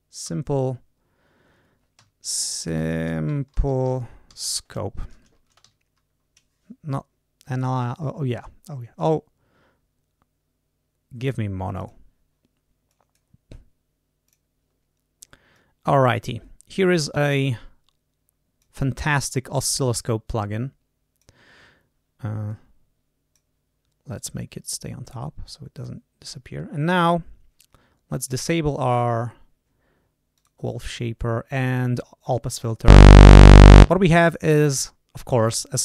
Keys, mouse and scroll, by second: 0.0-0.1 typing, 1.9-5.5 typing, 7.4 click, 11.6 click, 12.8 click, 14.2 click, 15.4-18.7 drag, 19.5-21.3 drag, 22.4-23.5 drag, 24.0 right click, 25.7 click, 28.1 click, 30.3 click.